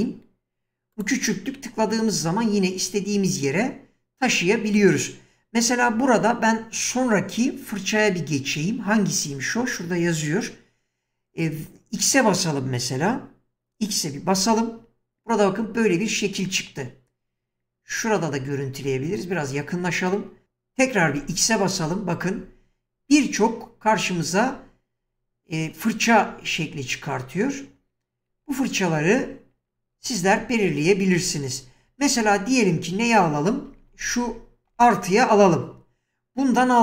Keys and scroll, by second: 14.4 typing, 21.1 typing, 25.5-26.3 typing, 28.3-34.7 typing.